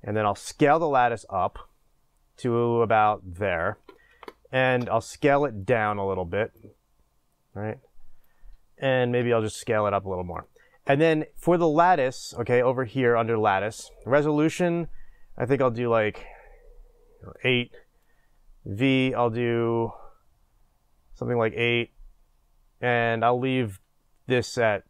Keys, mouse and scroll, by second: 0.4 s, 3.7-4.4 drag, 5.7 shift+space, 6.5-10.4 drag, 9.2 s, 14.6-24.8 drag.